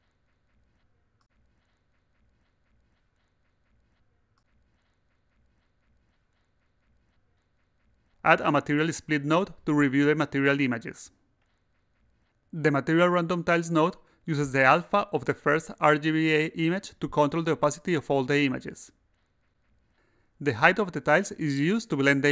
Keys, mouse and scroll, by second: 1.1 click, 3.8 click, 7.3 click, 8.3 click, 12.9 click, 14.5 click, 15.8 click, 17.9 click, 19.3 click, 22.0 click.